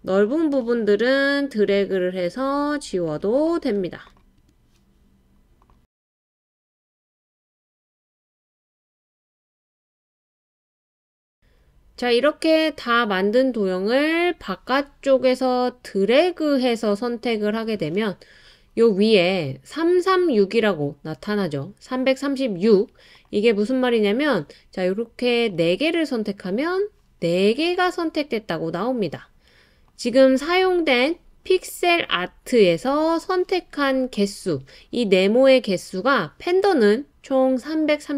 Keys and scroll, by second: 8.5 BackSpace.